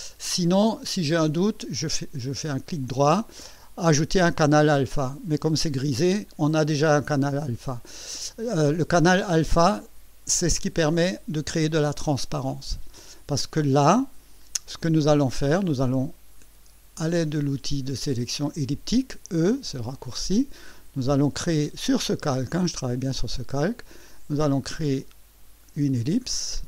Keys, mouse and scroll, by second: 0.0-0.7 alt+scroll down 2, 7.8 click, 19.7 click, 24.1-26.2 drag.